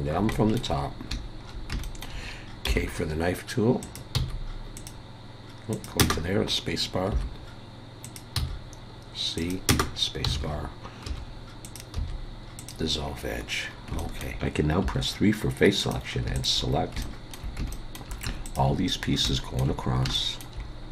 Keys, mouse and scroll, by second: 0.3 shift+middle click, 0.8 scroll up 2, 1.4 shift+scroll up 3, 1.8 shift+middle click, 2.6 k, 10.3 alt+a, 11.6 click, 11.9 x, 13.1-14.0 scroll down 7, 14.0 shift+middle click, 14.5 scroll up 3, 14.8 3, 15.8 click, 16.3 shift+click, 16.7-17.0 scroll down 3, 17.0 shift+middle click, 17.4 shift+scroll up 1, 17.7 shift+middle click, 18.4 shift+click, 18.8-19.2 scroll down 2, 19.2 shift+middle click, 20.6 scroll up 3.